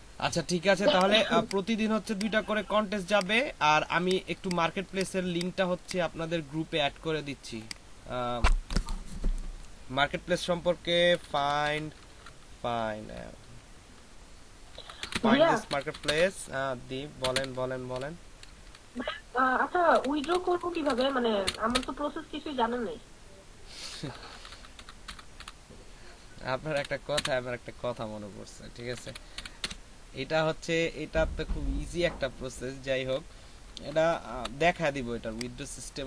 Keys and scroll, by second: 11.1-11.8 typing, 14.9-17.2 typing, 18.3-18.7 typing, 19.9-21.8 typing, 24.0 BackSpace, 24.1 BackSpace, 24.4 BackSpace, 26.7 t, 27.1 space, 28.8-29.6 typing, 33.7 shift+Return.